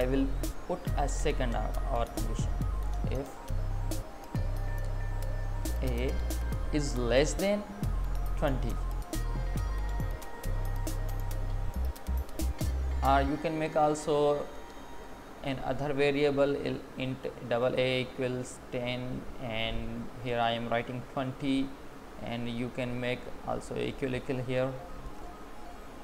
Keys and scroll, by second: 5.2 Left, 9.4 Right, 9.9 Left, 12.2 ctrl+z, 12.9 Up, 14.3 space, 15.8 space, 21.6 Down, 22.1 Up, 22.4 Left, 23.9 Right, 25.4 Down, 25.9 Left.